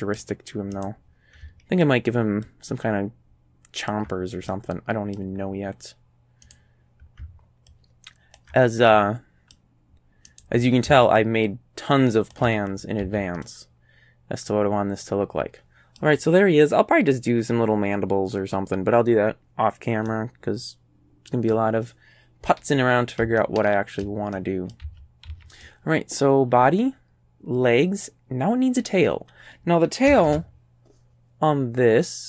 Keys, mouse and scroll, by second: 0.8 right click, 2.5-4.1 ctrl+drag, 4.5 ctrl+middle click, 6.5 right click, 7.7 ctrl+click, 8.9 ctrl+click, 10.3 right click, 11.2-12.5 ctrl+drag, 12.8 ctrl+scroll down 3, 13.0 a, 13.5-15.0 drag, 15.0-16.2 middle drag, 20.1-21.7 right drag, 23.4 shift+right click, 24.3 shift+right click, 24.7 click, 24.9 a, 25.3 a, 25.6-29.0 drag, 30.3 shift+a.